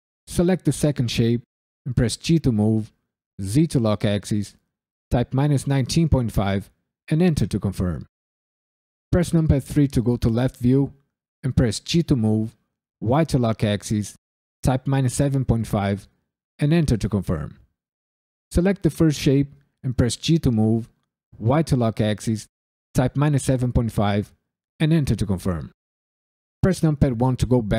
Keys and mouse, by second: 0.2 click, 2.2 g, 3.3 z, 5.1 KP_Subtract, 5.5 KP_1, 5.8 KP_9, 6.1 KP_Decimal, 6.5 KP_5, 7.0 KP_Enter, 7.6 ctrl+middle click, 9.3 KP_3, 11.8 g, 13.0 y, 14.6 KP_Subtract, 15.1 KP_7, 15.6 KP_Decimal, 16.1 KP_5, 16.6 KP_Enter, 18.3 click, 20.2 g, 21.3 y, 22.9 KP_Subtract, 23.3 KP_7, 23.7 KP_Decimal, 24.0 KP_5, 24.8 KP_Enter, 26.6 KP_1.